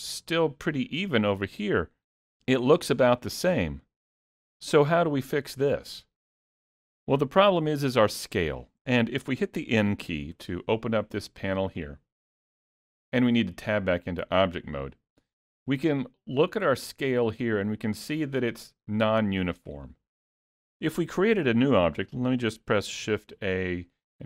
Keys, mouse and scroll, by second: 1.7-3.0 scroll up 2, 3.0 scroll down 2, 3.4 shift+middle click, 5.7 middle click, 10.4 n, 13.1 Tab, 23.3 shift+a.